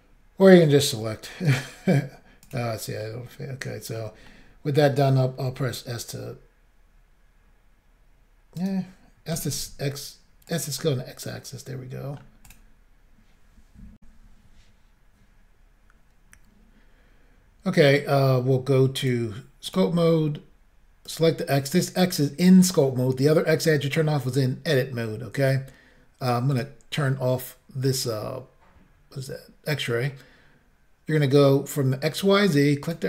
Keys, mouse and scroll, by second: 0.6 middle click, 1.5 right click, 2.4 click, 3.0 middle click, 4.3 middle click, 5.5 s, 8.6 right click, 9.4-9.7 typing, 10.5 click, 10.8 middle click, 12.5 click, 14.0 Insert, 19.0 click, 19.7 click, 21.1 click, 26.5 click, 32.8 click.